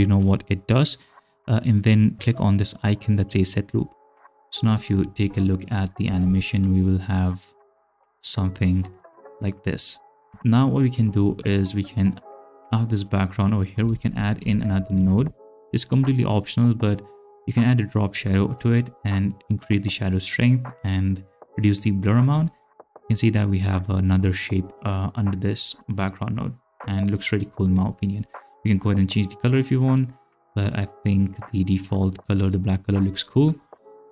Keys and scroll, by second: 6.1 ctrl+space, 10.3 space, 13.9-15.7 typing.